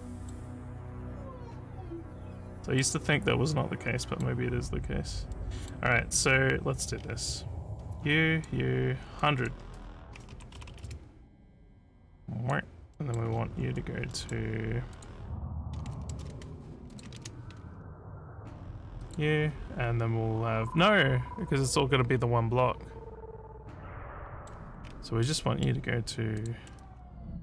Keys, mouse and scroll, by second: 2.5 middle click, 3.5 middle click, 5.4 middle click, 6.4 scroll down 1, 6.4 scroll down 1, 7.8 click, 9.2 click, 12.1 click, 13.0 middle click, 13.3-13.8 scroll down 5, 14.1 middle click, 15.0 click, 16.1 ctrl+c, 16.9 click, 17.2 ctrl+v, 18.4 click, 24.1 middle click, 24.8 scroll down 2, 25.4 middle click, 26.4 click.